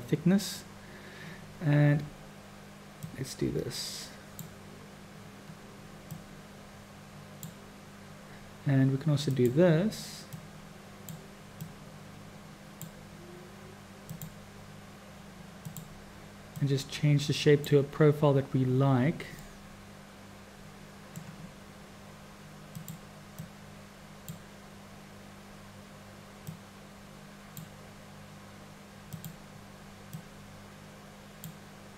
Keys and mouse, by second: 3.0-4.5 drag, 6.2-7.5 drag, 9.3 click, 10.5 click, 11.6-12.9 drag, 14.1 drag, 15.6 click, 16.5-17.8 drag, 19.4 middle click, 19.5 click, 19.7 middle click, 19.8-21.2 drag, 22.9 click, 23.5 click, 26.5-27.7 drag, 29.1 click, 30.1-31.5 drag.